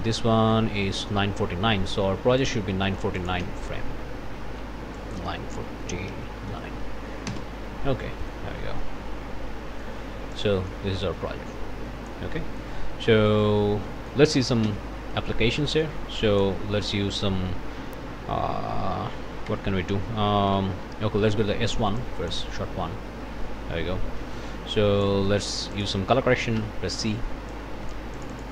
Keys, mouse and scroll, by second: 0.1-2.7 drag, 2.8 click, 3.4 s, 5.0 click, 5.8 KP_9, 6.1 KP_4, 6.5 KP_9, 7.3 KP_Enter, 8.2 click, 8.8-10.0 drag, 10.3-12.3 drag, 12.4 click, 12.9-13.2 scroll up 1, 13.3 scroll down 1, 13.4 click, 13.9-14.3 scroll down 2, 14.0 click, 14.6 ctrl+s, 15.1 ctrl+click, 15.2-15.7 ctrl+scroll down 3, 15.3 click, 15.7 click, 16.2 click, 19.5 Tab, 21.1 Escape, 22.0 middle click, 24.2 middle click, 24.7 middle click, 25.7 click, 26.6 c, 27.5 middle click.